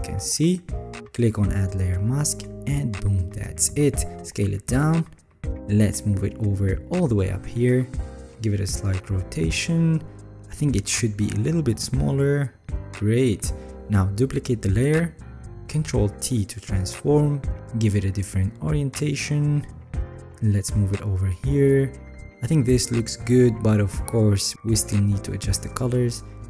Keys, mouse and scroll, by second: 4.1 ctrl+t, 8.2-9.3 alt+scroll, 15.4 ctrl+j, 16.8 ctrl+t, 24.1-26.0 alt+scroll up 6, 26.0-26.4 alt+scroll.